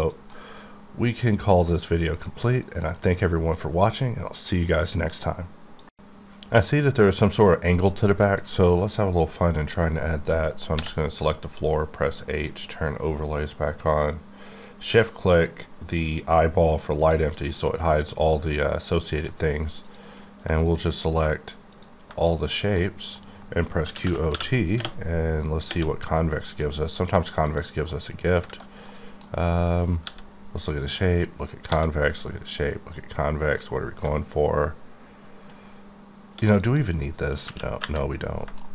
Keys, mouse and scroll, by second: 0.1 click, 0.4 middle click, 10.7 click, 13.7 shift+click, 17.0 shift+click, 17.6 middle click, 19.8 middle click, 20.7 shift+click, 21.7 click, 22.4 shift+click, 22.8 middle click, 23.9-24.3 typing, 26.5 click, 27.9 middle click, 28.4 typing, 28.8 click, 29.4 middle click, 30.0 g, 31.1 right click, 31.7 g, 33.6 right click, 34.2 middle click, 35.1 middle click, 36.4 x, 36.6 click, 37.4 KP_1, 37.8 KP_5, 38.6 shift+middle click.